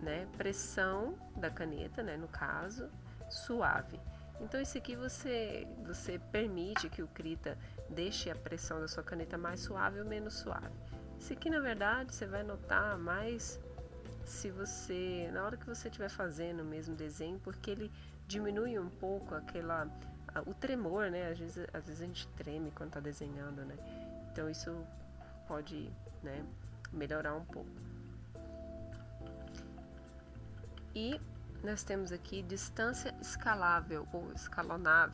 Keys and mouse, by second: 4.2 click, 10.0 click, 11.0 click, 11.6 click, 12.2 click, 12.8 click, 14.1 click, 14.7 click, 15.3 click, 15.8 click, 16.3 click, 25.3 click, 29.3 ctrl+z.